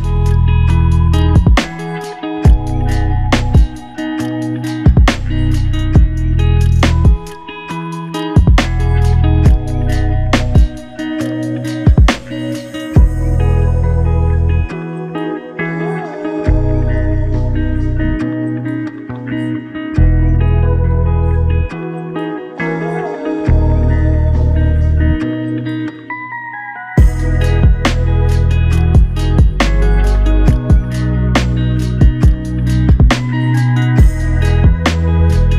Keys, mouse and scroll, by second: 2.7 f, 27.1 double click.